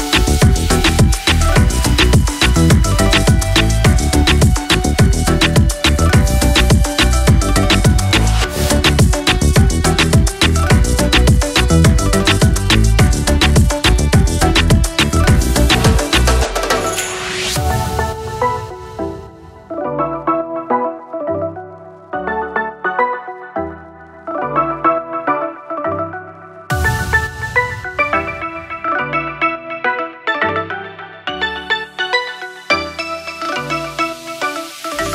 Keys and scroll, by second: 18.6 Delete, 22.3 Delete, 26.4 Delete, 27.6 ctrl+=, 28.0 Delete, 28.5 Delete, 30.2 Delete, 32.3 Delete, 32.7 ctrl+z, 33.0 Delete.